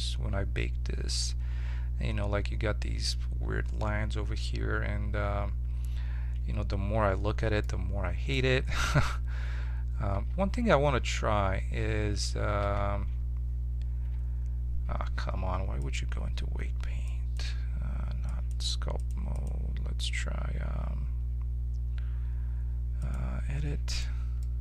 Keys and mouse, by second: 6.3 Tab, 6.8 Tab, 9.0 Tab, 9.4 Tab, 10.3 ctrl+Tab, 11.0 Tab, 11.8 Tab, 12.2 Tab, 12.6 z, 14.0 Tab, 17.3 click, 18.2-21.8 drag, 23.9-24.6 right drag.